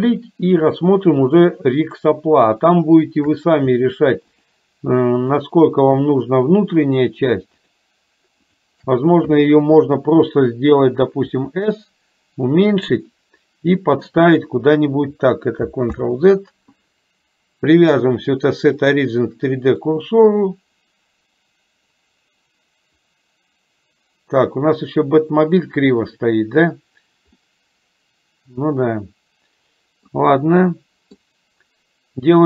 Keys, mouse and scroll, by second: 0.7 shift+click, 4.5 shift+click, 7.0 shift+click, 7.6 shift+click, 8.5 shift+click, 11.5 s, 12.9-14.4 middle drag, 16.0 ctrl+z, 17.9-20.0 drag, 27.5-30.3 middle drag, 30.6 middle click.